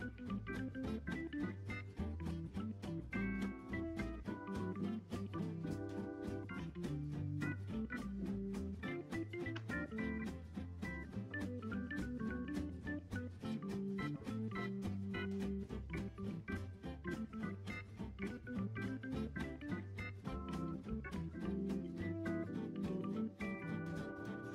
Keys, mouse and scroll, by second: 6.0 alt+h, 6.4-6.9 scroll up 3, 6.9 click, 7.4 click, 8.0-8.8 scroll down 2, 8.8-9.4 shift+middle drag, 9.4 z, 10.5 click, 10.8 click, 13.1-14.7 drag, 15.5 click, 16.5 0, 16.6 0, 19.5 click, 20.5 click, 21.7 click.